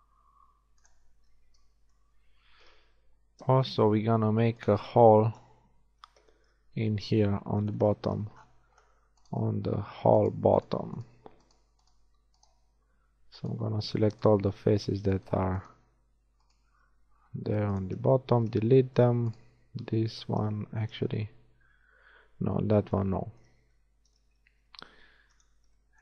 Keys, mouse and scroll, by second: 2.8 ctrl+Tab, 5.4 KP_1, 6.0 z, 7.7 z, 17.0 x, 19.4 click, 19.8 x, 20.4-21.6 drag, 21.0 KP_1, 21.6 z, 22.2 z, 23.4-24.8 shift+middle drag, 24.5 ctrl+Tab, 25.6 shift+middle click.